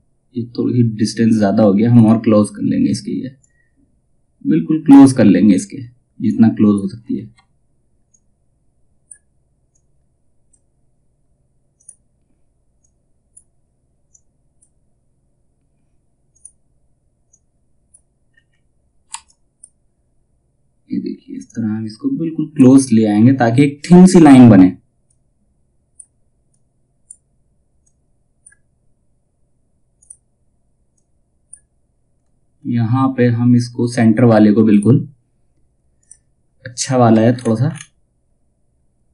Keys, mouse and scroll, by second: 0.9-1.3 scroll down 1, 2.9-6.7 drag, 6.7 ctrl+z, 7.6-17.8 drag, 17.8 scroll down 1, 18.6 F2, 18.8-22.5 drag, 22.5 scroll down 1, 24.6-31.7 drag, 31.7-32.1 scroll up 1, 34.2 click, 36.3 scroll down 1, 37.9-38.8 alt+scroll up 1, 38.8-39.1 alt+scroll down 1.